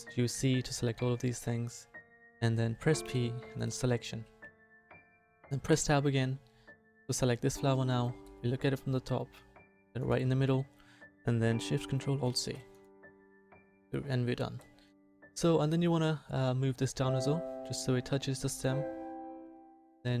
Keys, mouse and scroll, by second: 3.0 p, 5.7 Tab, 16.9-18.7 right drag, 19.6-20.2 drag.